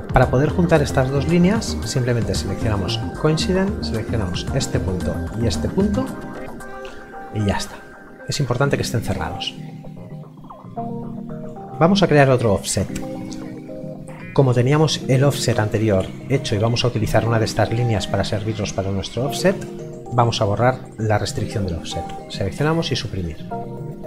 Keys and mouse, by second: 3.0 click, 10.8 click, 20.1 click, 22.6 Delete.